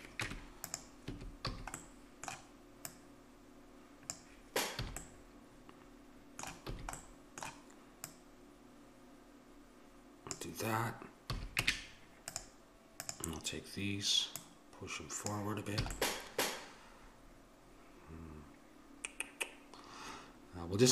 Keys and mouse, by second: 0.2 Tab, 1.1 a, 1.6 a, 2.8-4.6 drag, 4.9 a, 6.7 a, 8.0-9.6 drag, 11.3 a, 11.6 Tab, 13.1-16.2 drag, 15.8 a, 16.2-17.5 middle drag.